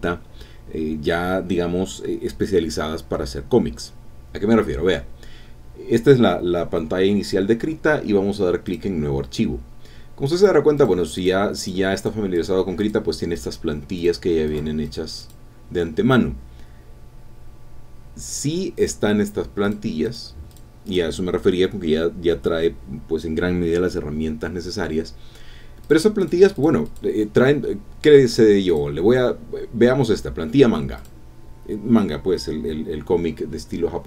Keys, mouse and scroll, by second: 8.7 click, 10.4 click, 10.8 click, 11.2 click, 11.6 click, 12.0 click, 12.3 click, 12.8 click, 13.3 click, 14.0 click, 14.5 click, 14.8 click, 15.2 click, 18.8 click, 19.6 click, 20.0 click, 20.5 click, 20.8 click, 25.8 click, 26.2 click, 26.5 click, 26.8 click, 28.7 click, 31.0 click.